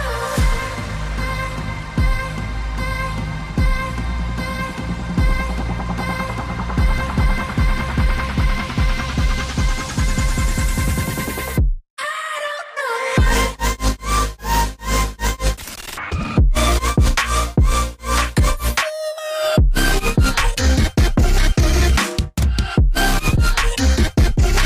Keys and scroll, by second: 0.0-0.5 typing, 15.8 ctrl+z, 23.3 z.